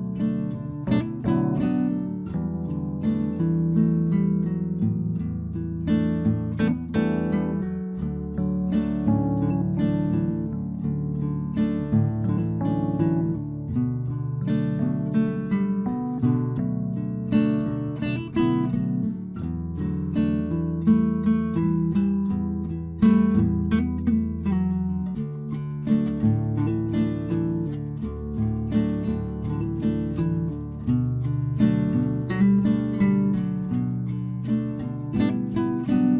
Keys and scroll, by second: 1.4 Return, 4.1 ctrl+t, 10.8 Return, 13.9 ctrl+t, 16.9 Return.